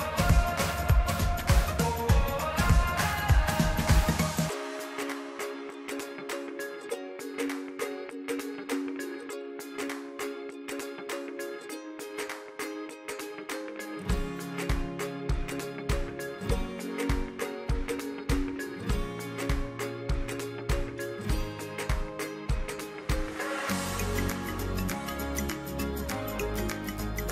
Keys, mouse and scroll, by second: 0.2-2.7 scroll down 1, 2.7-6.8 middle drag, 6.8 e, 15.3-18.5 drag, 24.0-27.3 middle drag.